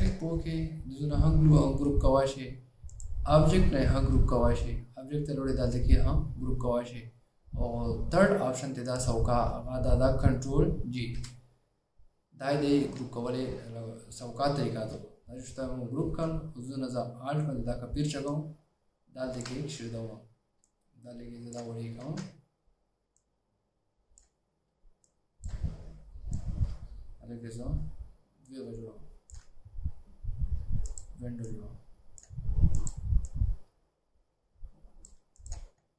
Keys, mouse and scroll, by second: 0.0 right click, 11.7 ctrl+g, 16.3 a, 16.3 alt+scroll down 1, 18.4 alt+click, 20.8 shift+click, 22.2 alt+scroll up 1, 25.2 shift+click, 26.5 alt+click.